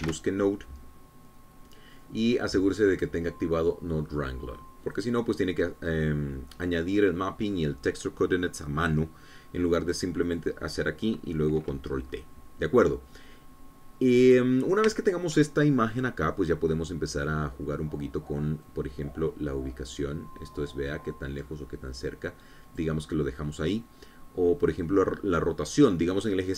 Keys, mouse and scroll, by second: 0.7 n, 0.9 o, 1.5 d, 1.5 e, 4.5 click, 6.5 click, 7.5 click, 11.8 click, 15.6-16.0 scroll down 2, 16.1 scroll up 3, 16.5 shift+click, 20.2-24.5 drag.